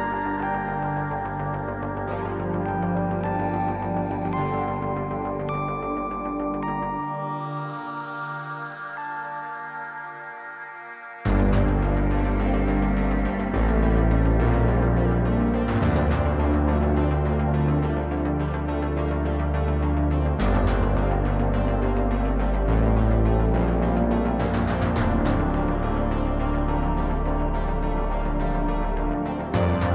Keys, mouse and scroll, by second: 1.4 click, 1.7 click, 2.4 click, 3.7 click, 4.1 click, 7.6-9.0 drag, 9.9 click, 10.3-11.3 drag, 14.5-18.0 ctrl+shift+drag, 19.1-20.2 drag, 20.7 click, 21.3 click, 24.7 click, 25.5 click.